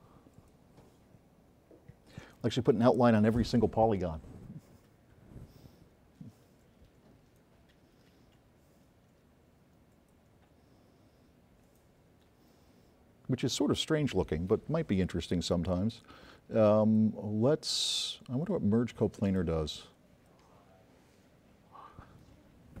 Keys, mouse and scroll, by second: 0.5 click, 20.6 click.